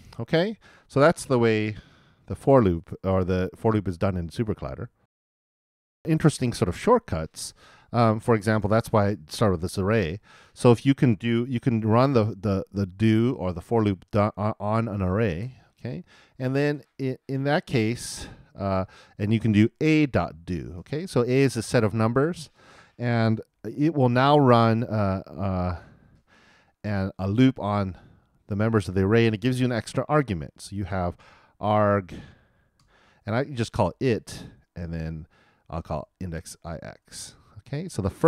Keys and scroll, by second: 5.0 alt+|, 15.4 super+Return, 23.4 shift+[, 23.5 shift+].